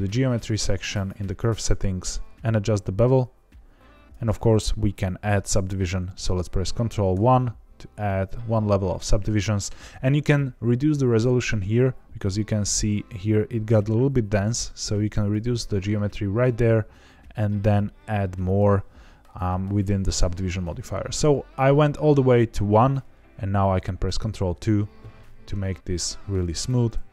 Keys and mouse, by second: 2.4-4.0 shift+drag, 7.1 ctrl+1, 15.1 click, 18.5 click, 24.0 ctrl+2, 24.9-26.2 middle drag, 26.5-27.1 right drag.